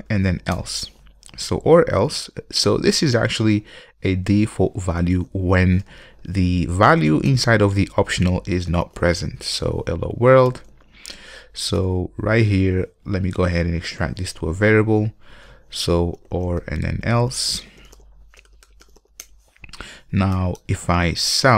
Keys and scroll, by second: 0.7 Return, 14.1 alt+super+v.